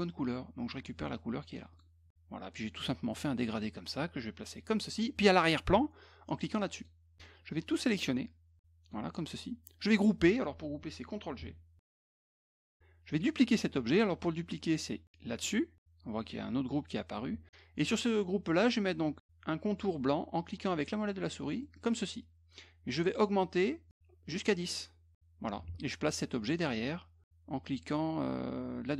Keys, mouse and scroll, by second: 1.7 click, 2.5 click, 3.4-4.9 drag, 6.8 click, 7.7-8.9 drag, 12.0 ctrl+g, 15.4 click, 21.6 middle click, 24.6 click.